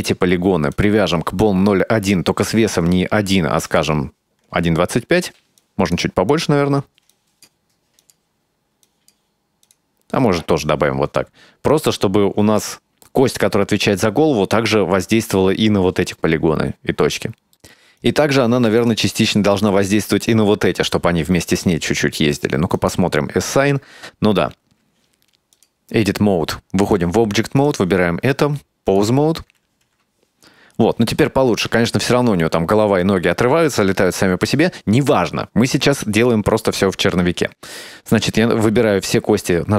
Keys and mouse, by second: 0.8 click, 2.3-3.4 drag, 3.7 click, 5.7 click, 6.4 click, 7.2 click, 8.1 click, 9.0 click, 9.7 click, 11.9-12.7 drag, 16.9 middle click, 18.0 right click, 18.9 shift+right click, 20.4 middle click, 22.9 click, 25.7-27.0 drag, 27.7 right click, 28.5-29.1 drag, 29.9 g, 39.4 a.